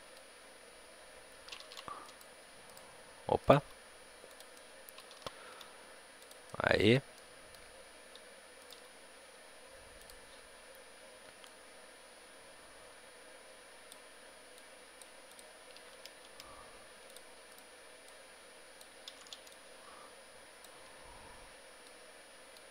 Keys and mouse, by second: 1.6 ctrl+z, 2.0-5.1 right drag, 3.5 g, 4.4-8.5 drag, 5.1 ctrl+z, 5.4 g, 8.5-11.4 right drag, 8.7 g, 11.4-13.3 drag, 14.5-18.0 drag, 16.9 a, 18.0-21.7 right drag, 21.7-22.7 middle drag, 21.7 b.